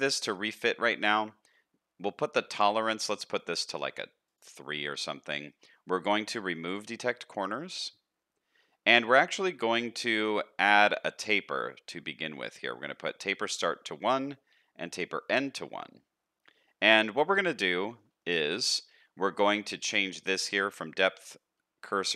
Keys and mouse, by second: 5.0 shift+middle click, 16.9 shift+middle click, 17.6 middle click, 18.2 shift+middle click.